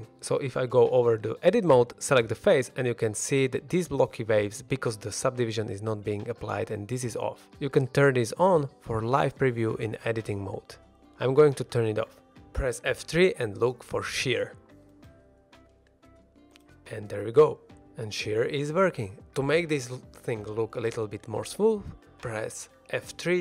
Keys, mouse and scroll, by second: 0.1 3, 0.4 click, 0.7 shift+middle drag, 1.6-2.1 scroll up 1, 2.1 middle click, 6.9 click, 8.2 click, 9.0 shift+middle drag, 9.3 scroll up 1, 9.6 middle drag, 9.9 shift+middle drag, 10.2 middle click, 12.4 click, 12.9 shift+middle drag, 13.6 shift+Left, 13.6 scroll down 1, 13.6 space, 13.7 F3, 17.3 x, 18.7 click, 19.2 middle click, 19.3 ctrl+Tab, 20.8 click, 21.5-22.3 scroll up 1, 22.3 F3.